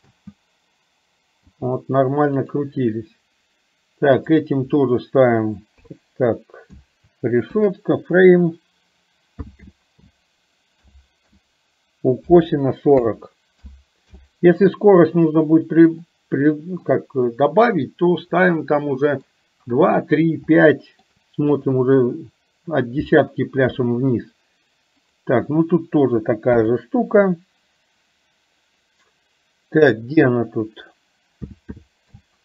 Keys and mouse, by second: 0.1 space, 1.4 space, 2.4 click, 4.6-14.3 drag, 16.2 middle click, 18.6 middle click, 20.6 shift+middle click, 25.2-32.4 drag.